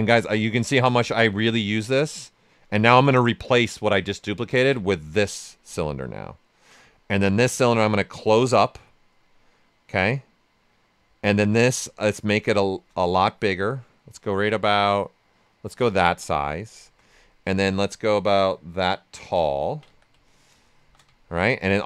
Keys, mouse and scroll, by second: 1.1 click, 4.4 click, 5.8 ctrl+right click, 6.9 ctrl+right click, 7.9 click, 9.1 right click, 11.4 w, 11.9 ctrl+right click, 13.2-15.8 drag, 15.8 right click, 16.7 shift+f, 17.5-19.4 drag, 19.4 ctrl+right click, 19.8 ctrl+q, 20.2 alt+right click, 20.7 shift+f, 21.2 ctrl+right click, 21.4 right click.